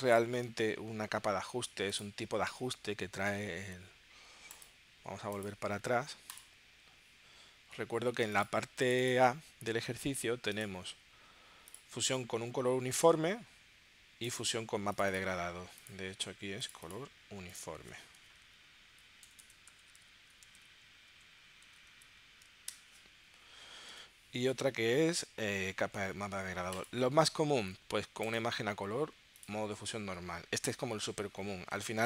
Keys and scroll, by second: 18.3-21.8 typing, 22.7 Return, 24.0 super+Tab.